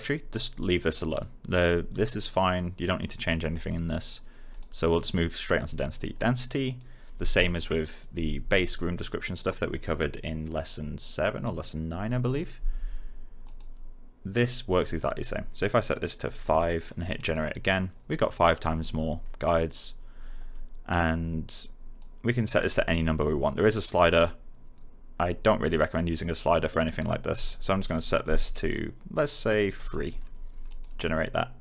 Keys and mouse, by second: 4.4 click, 6.4 click, 13.4 click, 16.4 5, 17.1 click, 21.9 click, 29.7 3, 30.6 click.